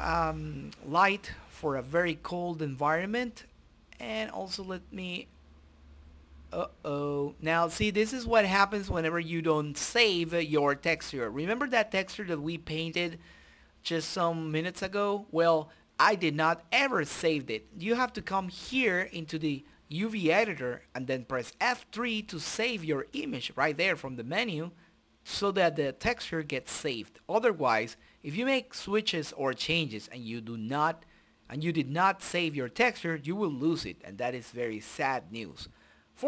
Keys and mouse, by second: 2.2 Delete, 3.9-5.7 drag, 5.5 shift+z, 7.5 click, 8.6 right click, 9.7 click, 10.1-11.5 middle drag, 11.5 click, 14.1-22.1 drag, 22.5-26.7 drag.